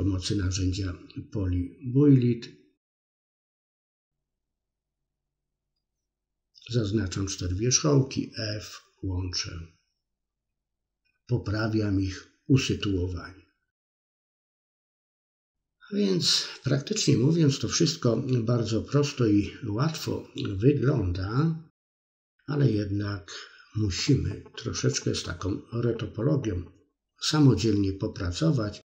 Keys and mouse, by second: 2.5 click, 3.4 shift+click, 3.8 f, 3.9 middle click, 5.6 f, 5.7 middle click, 7.5 click, 8.3 click, 8.8-9.9 middle drag, 10.1 KP_3, 10.4 shift+middle click, 10.6 middle click, 14.6 shift+click, 15.3 f, 15.4-16.5 middle drag, 16.9 click, 17.8 ctrl+r, 18.6 KP_3, 20.6 middle click, 21.7-24.0 drag, 24.0 middle click, 24.6 click, 25.0 middle click, 25.9 click, 26.2 middle click, 27.1 click, 27.6 middle click.